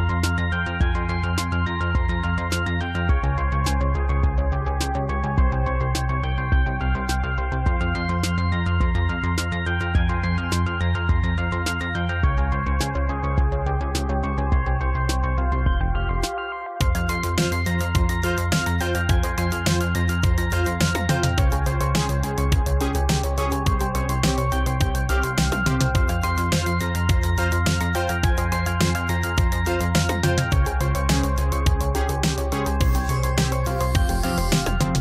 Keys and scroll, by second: 4.3 ctrl+z, 20.0 space.